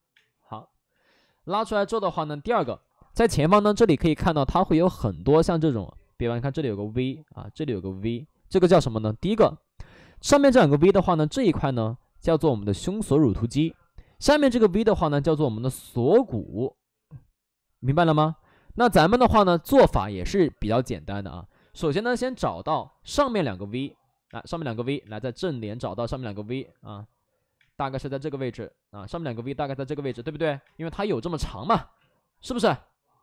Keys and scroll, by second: 0.0 space, 2.5 space, 21.9 5, 22.0 space, 22.6 space, 24.2 space, 25.0 space, 25.5 space, 28.3 ctrl+z, 28.9 ctrl+z, 30.0 space, 30.5 space, 31.9 ctrl+z, 32.5 ctrl+z.